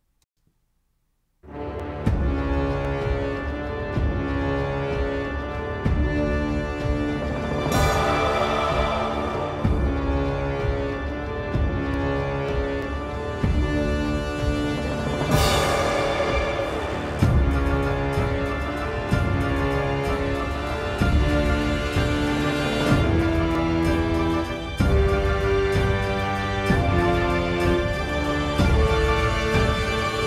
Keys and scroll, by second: 0.3 space.